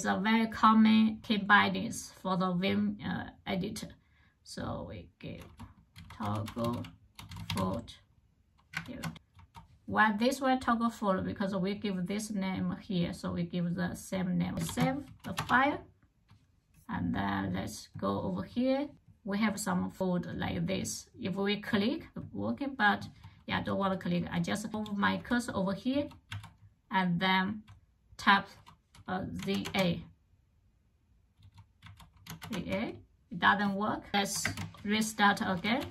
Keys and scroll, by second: 5.2-10.6 typing, 8.6 Escape, 14.3-15.4 typing, 16.7 typing, 23.3-25.8 typing, 29.2 typing, 31.0-33.8 typing, 34.3 alt+Tab, 35.4-35.9 typing.